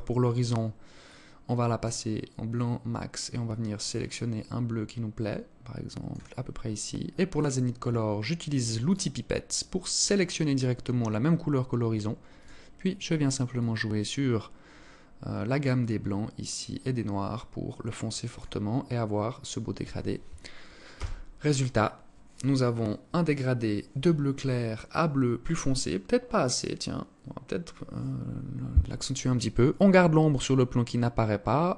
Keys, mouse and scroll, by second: 6.8 click, 11.9 click.